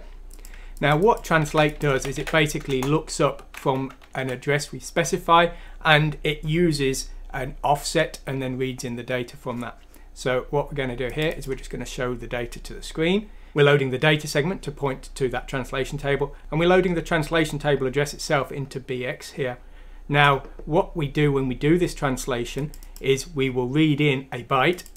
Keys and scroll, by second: 1.5 ctrl+c, 2.0 ctrl+f, 2.2 ctrl+v, 2.7 Return, 3.8 Escape, 4.2 F3.